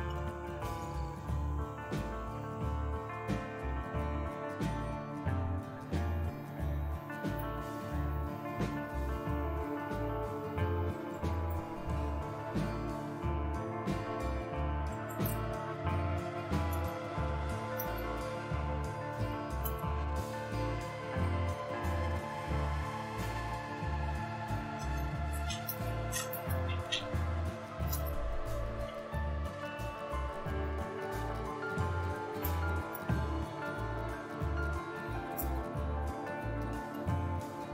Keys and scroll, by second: 0.0-0.1 typing, 5.2 Up, 14.5-19.8 typing, 22.4 BackSpace, 22.6 BackSpace, 22.7 BackSpace, 22.9 BackSpace, 24.4-30.4 typing, 32.4-33.0 typing, 34.0-37.4 typing.